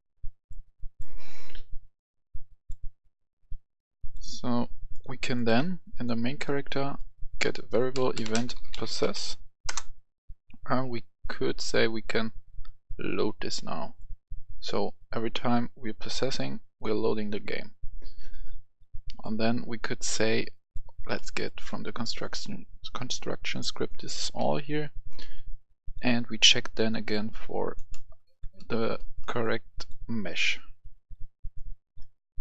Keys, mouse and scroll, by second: 0.2-6.4 drag, 6.4-8.0 right drag, 7.7-9.0 typing, 8.1 right click, 9.7 Return, 11.1-14.9 drag, 21.2 right click, 22.2-23.9 drag, 24.4 ctrl+c, 25.9 click, 26.3 right click, 26.9 click, 27.9 right click, 28.6 ctrl+v, 29.0 right click, 29.4-32.4 drag.